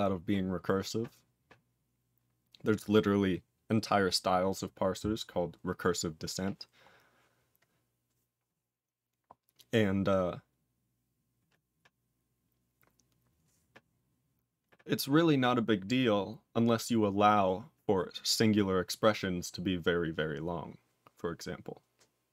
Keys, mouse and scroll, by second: 6.8-7.4 scroll down 5, 13.8 scroll up 9.